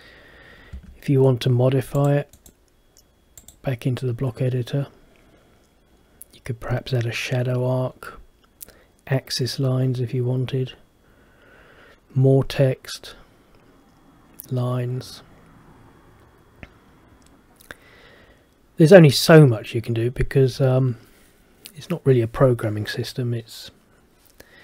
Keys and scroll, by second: 0.8 Escape.